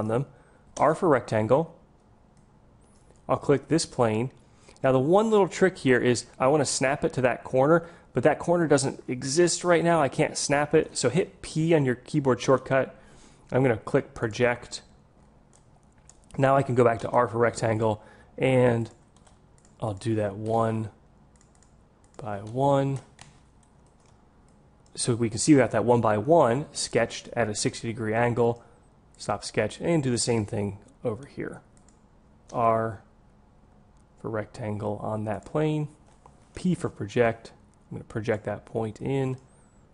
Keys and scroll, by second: 1.3 r, 1.8 r, 11.1 p, 17.1 r, 32.6 r, 36.8 p.